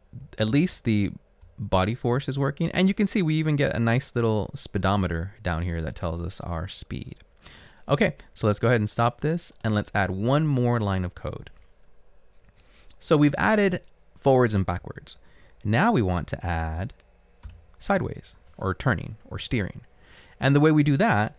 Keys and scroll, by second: 0.6-1.9 typing, 15.0 Up, 15.6 Up, 16.0 Down, 17.5 Return, 18.2 Up.